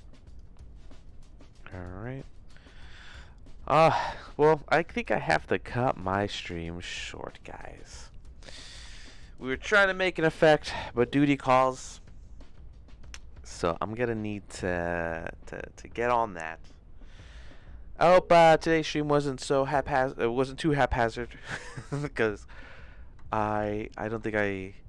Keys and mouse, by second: 23.3 shift+middle click.